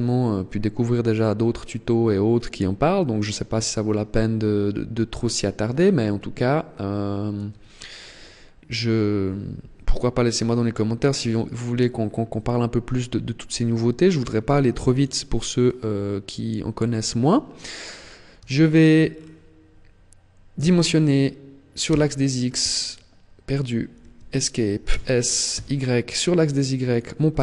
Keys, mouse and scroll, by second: 9.9-11.0 scroll up 6, 11.0-12.6 scroll up 3, 12.6 scroll up 1, 13.1 click, 15.2 scroll down 3, 16.5 middle click, 18.2 shift+middle click, 18.8-19.5 scroll down 3, 20.3 s, 24.6 s, 26.7 click.